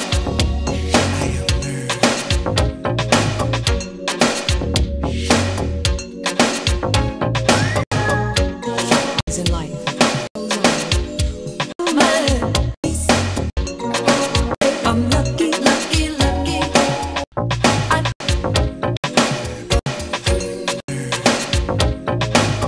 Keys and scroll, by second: 7.8 3, 9.2 3, 11.7 3, 17.2 3.